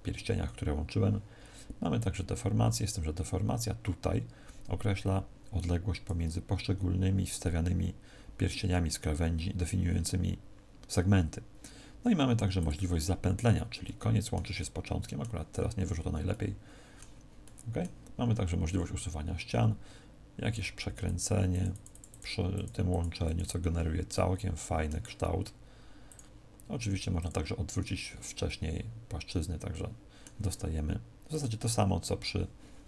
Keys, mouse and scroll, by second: 1.9 click, 12.6 click, 13.7 middle click, 14.5 middle click, 20.4 click, 20.9 click, 24.1 middle click, 26.1 click, 27.2 click, 28.4 middle click, 31.3 click.